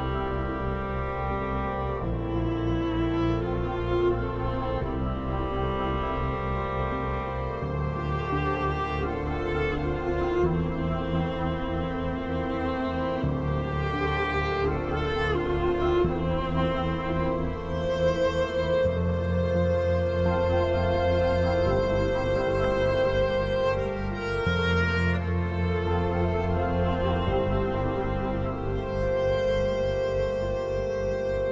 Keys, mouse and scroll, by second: 0.8 ctrl+right click, 1.6 ctrl+u, 2.4 shift+click, 3.2 Delete, 3.4 click, 4.8 End, 5.7 shift+Home, 6.9-8.4 typing, 8.5 Return, 9.9-13.3 typing, 14.0 F2, 14.4-15.7 drag, 15.7 F10, 18.1-24.1 drag, 24.1 F3, 24.8 click, 25.8 Escape, 26.8 click, 27.7 ctrl+right click, 28.4 click, 28.4-31.0 drag, 31.0 shift+n.